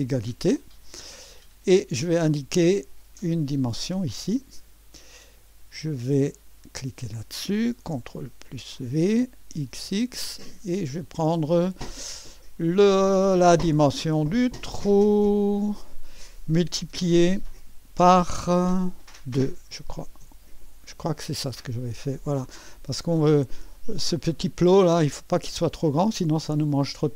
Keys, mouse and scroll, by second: 0.0 e, 1.7 click, 4.3 click, 6.7 click, 8.3 ctrl+v, 9.6 typing, 14.9 click, 17.9 *, 19.3-20.9 typing, 23.7-27.1 drag.